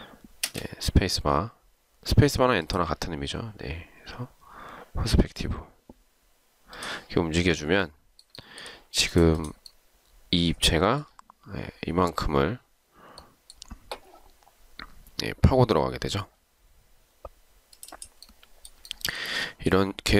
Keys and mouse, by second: 0.6 space, 8.6 shift+right click, 19.0 shift+right click.